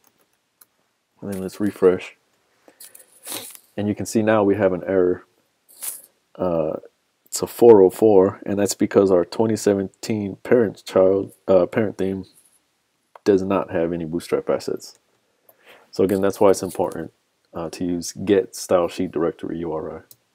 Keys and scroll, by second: 0.1 super+Tab, 1.6 super+r, 14.9 super+Tab, 16.9 super+z, 20.1 super+s.